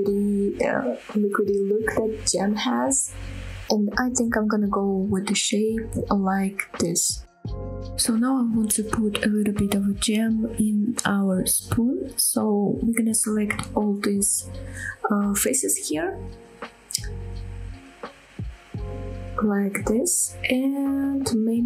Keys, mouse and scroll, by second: 0.0 Tab, 0.0 middle click, 0.7 shift+middle click, 1.0 click, 1.1-3.8 typing, 1.3 click, 1.4 click, 1.4 middle click, 1.6 click, 2.2 shift+middle click, 2.2 click, 2.5 right click, 2.5 middle click, 3.0 middle click, 3.1 ctrl+z, 3.2 ctrl+z, 3.3 click, 3.3 middle click, 3.6 click, 3.9 middle click, 4.2 shift+click, 4.6 shift+middle click, 4.8 scroll down 2, 4.9 a, 5.0 scroll up 2, 5.1 g, 5.4 shift+click, 5.5 middle click, 5.8 scroll down 2, 6.0 middle click, 6.1 click, 6.2 g, 6.4 middle click, 6.6 click, 6.6 middle click, 6.7 r, 6.9 right click, 7.1 Tab, 7.1 middle click, 7.5-8.3 scroll up 2, 8.5 shift+middle click, 8.5 scroll up 1, 8.7 click, 9.0 Tab, 9.4 scroll up 1, 9.7 middle click, 9.9 scroll up 1, 11.5 click, 12.2 shift+click, 13.9 ctrl+click, 14.3 ctrl+click, 14.6 ctrl+click, 15.3 ctrl+click, 15.8 ctrl+click, 16.1 ctrl+click, 16.7 ctrl+click, 17.0 ctrl+click, 17.2 ctrl+click, 17.6 ctrl+click, 17.8 ctrl+click, 18.5 ctrl+shift+click, 19.0 ctrl+shift+click, 19.4 ctrl+shift+click, 20.0 ctrl+shift+click, 20.8-21.2 scroll down 2, 21.2 middle click.